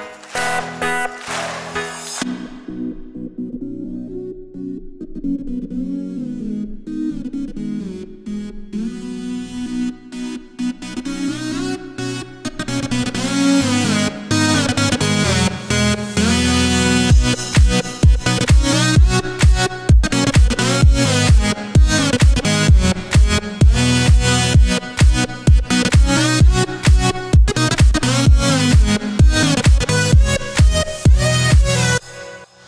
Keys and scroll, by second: 0.0-2.5 typing, 6.0 q, 6.4 s, 7.1 Escape, 15.0-17.1 typing, 22.6-23.6 typing, 31.9-32.6 typing.